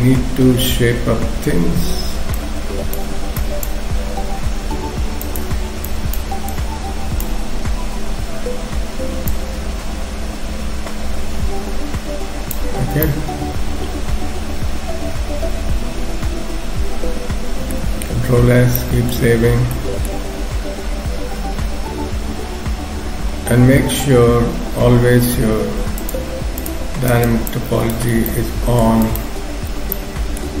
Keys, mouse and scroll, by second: 2.4 click, 3.4 click, 5.9 click, 6.5 click, 13.0 middle click, 18.3 ctrl+s, 18.8 shift+middle click, 19.3-21.2 scroll up 5, 19.8 middle click, 23.6 x, 26.0 shift+click, 26.6 shift+click, 28.2 scroll down 1, 28.3 middle click, 29.1 shift+click, 29.7-30.6 scroll down 3, 30.0 middle click.